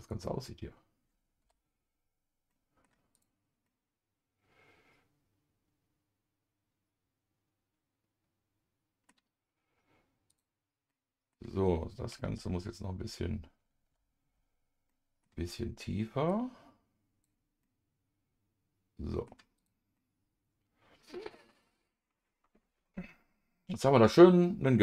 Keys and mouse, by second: 0.0 Tab, 0.0 click, 1.4 KP_Divide, 2.5 middle click, 3.1 click, 3.6-9.1 middle drag, 10.9 middle click, 12.4 Down, 13.0 Down, 14.9 Down, 14.9 middle click, 16.3 click, 16.8 click, 17.6-19.2 middle drag, 19.6 click, 19.9-21.4 middle drag, 22.8-24.8 middle drag.